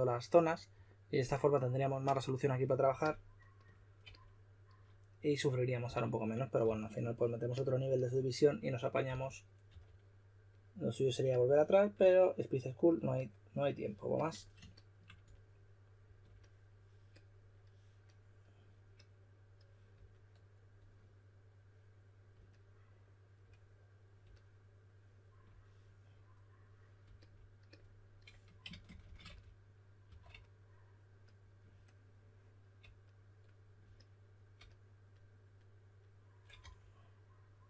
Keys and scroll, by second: 5.8-7.1 typing, 9.0-9.6 typing, 28.5-30.5 typing, 36.5 d.